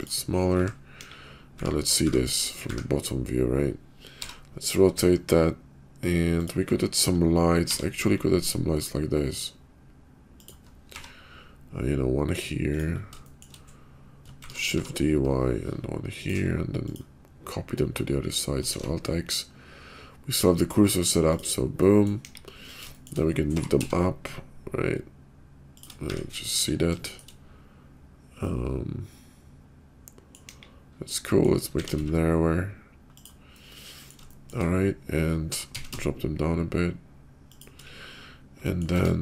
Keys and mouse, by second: 0.0-2.6 typing, 4.1 r, 7.6 r, 10.9 g, 13.2 shift+click, 14.4 shift+d, 16.7 shift+click, 18.6 alt+x, 21.3 click, 21.8 middle drag, 22.2 KP_5, 22.9 shift+middle drag, 23.4 g, 26.0 `, 26.5 KP_5, 27.0 shift+middle drag, 28.3-30.3 middle drag, 30.4 KP_5, 31.0-31.4 middle drag, 31.7 s, 33.4-34.1 middle drag, 34.3 shift+middle click, 35.5 g, 38.1 /, 38.6 middle click, 38.9 Tab.